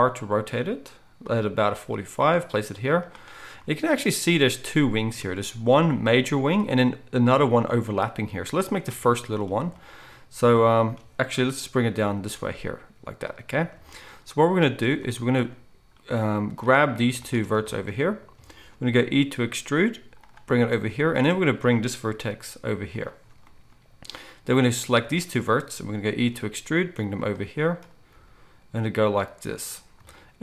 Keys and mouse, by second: 1.7 g, 11.9 g, 19.0 e, 22.1 g, 24.9-29.9 shift+drag, 26.1 e, 28.1 g, 29.9-30.4 shift+middle drag.